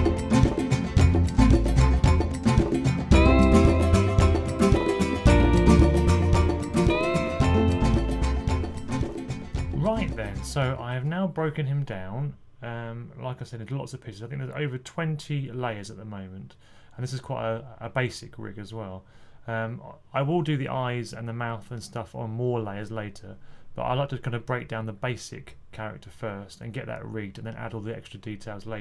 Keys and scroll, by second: 0.0-0.8 typing, 1.8 super+8, 2.2 Left, 2.3 super+8, 2.9-4.4 typing, 4.3 Right, 5.9 typing.